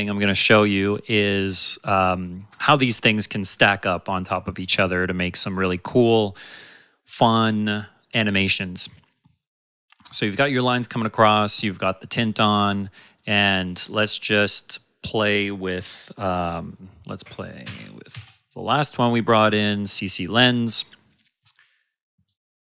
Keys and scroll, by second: 17.2 shift+Num_Lock, 17.4-18.7 typing, 20.1-20.8 typing.